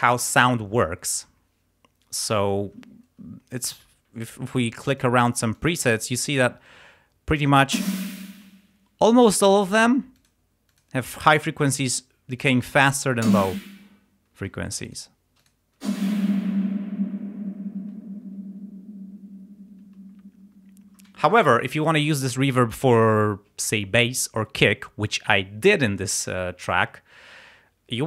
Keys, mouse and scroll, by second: 4.9 click, 5.6 click, 6.3 click, 7.7 space, 9.8 click, 10.2 click, 10.7 click, 12.4 click, 13.2 space, 14.4 space, 14.9 click, 15.4 click, 15.8 space, 17.8 space.